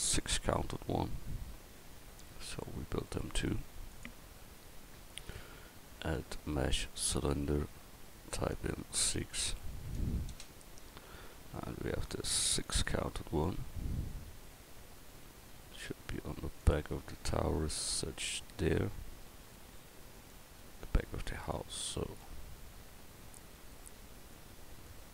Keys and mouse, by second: 1.6-2.5 middle drag, 11.7 s, 15.3 s, 17.1-18.7 drag, 20.3-21.6 middle drag, 22.2 middle click.